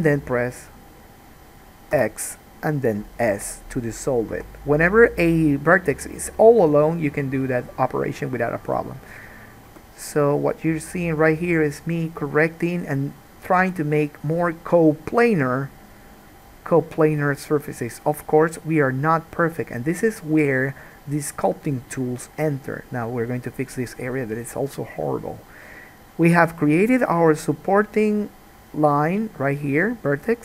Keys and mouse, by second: 2.1 x, 8.7 click, 9.9 g, 13.7 g, 15.7-30.4 drag.